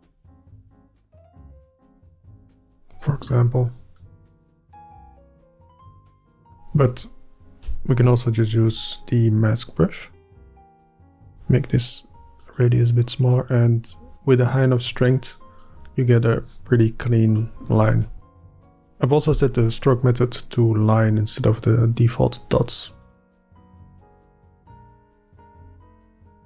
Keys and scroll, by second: 7.8-10.4 space, 11.2 f, 18.0 ctrl+z, 19.4 e, 23.4 f, 24.1 f.